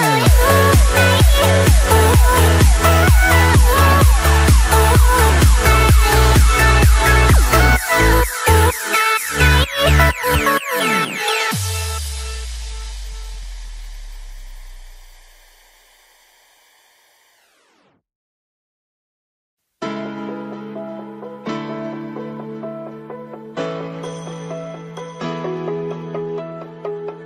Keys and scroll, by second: 7.1 ctrl+g.